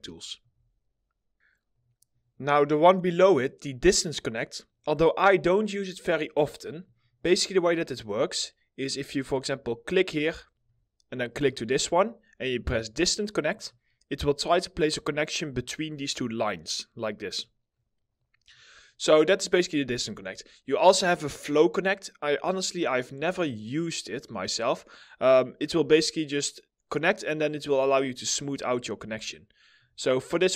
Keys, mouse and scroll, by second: 0.0 alt+middle click, 6.7 double click, 11.3 ctrl+click, 11.3-11.8 scroll up 1, 17.4 middle click, 19.8 ctrl+z, 27.1 middle click, 27.6-28.0 scroll down 1, 28.1 middle click, 28.9 alt+middle click, 29.7-30.2 scroll down 1, 30.4 alt+middle click.